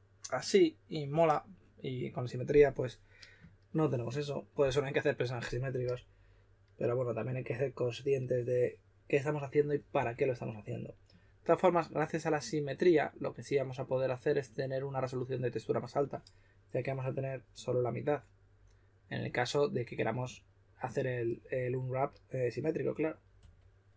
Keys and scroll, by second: 9.9 typing, 23.4 typing.